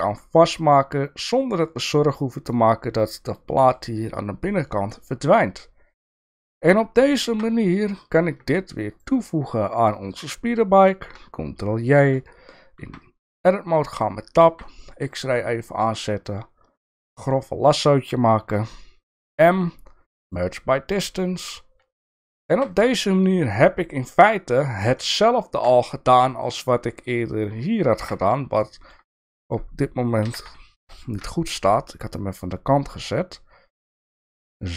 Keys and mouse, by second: 0.4-1.6 middle drag, 2.5-3.8 middle drag, 4.7-6.0 middle drag, 7.3 Tab, 11.7 ctrl+j, 12.8 Tab, 13.2 middle click, 14.5 alt+z, 14.7 middle click, 16.3-17.3 drag, 19.3 m, 21.9 alt+z, 22.5 Tab, 22.7 click, 23.1 middle click, 25.0 shift+middle click, 26.8 middle click, 28.0 KP_7, 28.6 shift+middle click, 29.5 click, 30.2 g.